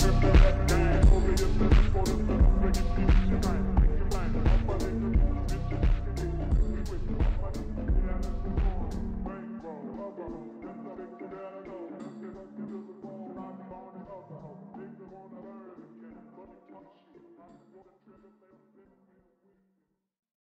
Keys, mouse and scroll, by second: 0.8 g, 3.6-4.2 middle drag, 4.2 click, 4.5 scroll down 3, 4.8-7.9 middle drag, 10.1-13.3 middle drag, 13.3 click, 13.6 Tab, 15.0 click, 15.4 scroll up 6, 16.5 shift+middle click, 16.9 scroll up 1, 17.0 middle click, 17.7-18.1 scroll down 1, 18.1 shift+middle click, 19.1-19.7 scroll down 1, 19.7-20.4 middle drag.